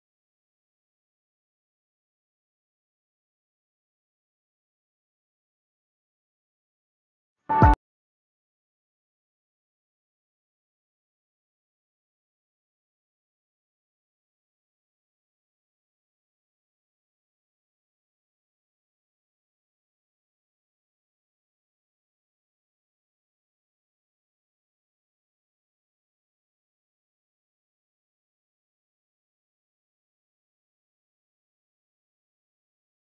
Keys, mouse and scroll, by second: 0.3 click, 0.5 scroll down 1, 1.9 right click, 2.3 click, 3.0 right click, 3.5 click, 6.2 click, 9.1 ctrl+z, 9.3 click, 10.2 right click, 10.5 click, 11.5-12.5 scroll up 1, 13.2 click, 16.1 click, 17.8-18.4 scroll down 1, 18.4 scroll up 1, 19.4 scroll down 1, 20.3-20.6 scroll up 1, 20.6 right click, 20.9 click, 23.8-26.5 drag, 26.5 ctrl+j, 27.2-27.5 scroll down 1, 27.7-28.2 scroll up 1, 28.2-29.0 typing, 29.5 Return, 30.4 click, 32.9 click.